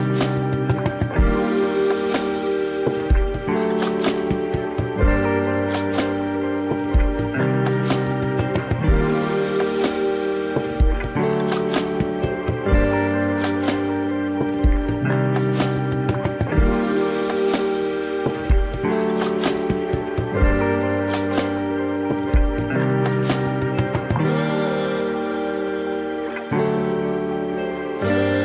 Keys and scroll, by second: 8.0 space, 10.6 ctrl+alt+z, 20.0 ctrl+-, 20.1 ctrl+=, 20.4 ctrl+-, 21.1 ctrl+=, 23.3 ctrl+alt+z, 25.2 ctrl+=, 25.5 ctrl+-.